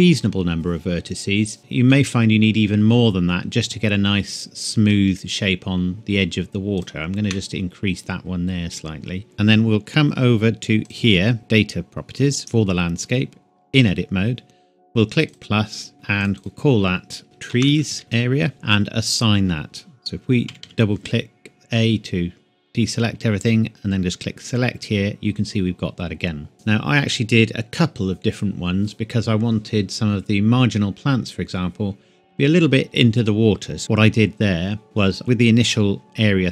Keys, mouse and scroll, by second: 1.9-2.2 scroll down 1, 2.2 scroll up 1, 6.8 shift+click, 15.2 click, 17.5-18.0 typing, 18.5 KP_Enter, 19.1 click, 20.4 a, 20.6 a, 24.4 click, 35.1 ctrl+Num_Lock.